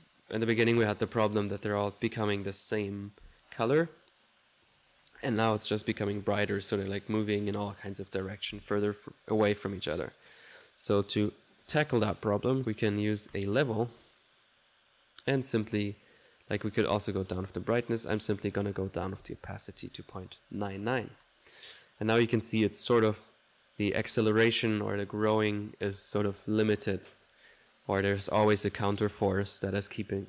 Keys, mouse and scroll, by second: 5.0-8.7 drag, 8.7 middle click, 9.4 click, 10.0 middle click, 10.9 right click, 11.4 click, 12.4-13.1 typing, 14.0 click, 14.6 click, 17.3 click, 18.0 click, 20.8 ctrl+1, 26.9 click.